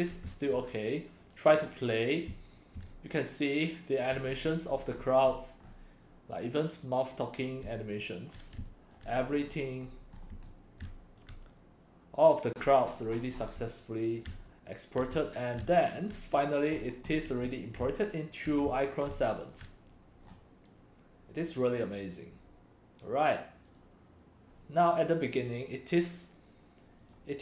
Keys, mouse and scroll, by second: 0.3 c, 0.5 click, 1.4 click, 1.8 click, 2.1-4.1 typing, 2.5-3.4 drag, 4.0 click, 4.2-5.8 scroll, 4.3 middle click, 4.6 middle click, 5.0 middle click, 5.3 middle click, 5.6 middle click, 7.6 right click, 8.3 right click, 9.0-9.8 scroll, 9.8-10.2 scroll up 10, 10.2 click, 10.3-10.9 typing, 11.2-12.4 drag, 12.5-13.6 scroll, 12.6-13.6 middle drag, 13.8 click, 13.8-14.9 typing, 16.0-16.8 right drag, 16.8-17.1 scroll up 8, 17.1-17.4 drag, 17.4-19.6 typing, 19.5 click, 20.3-20.7 scroll down 6, 21.5 scroll, 23.8 click, 24.1 right click, 24.7 drag, 25.5 right click, 25.7-26.1 right drag, 26.9 right click, 27.2-27.4 drag.